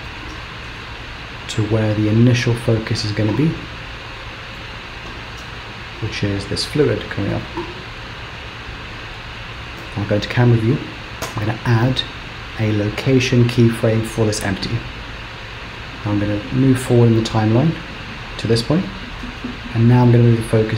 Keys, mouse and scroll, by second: 3.5 middle click, 5.2 g, 7.2 g, 9.8 KP_0, 11.3 i, 16.1 click, 19.0 g.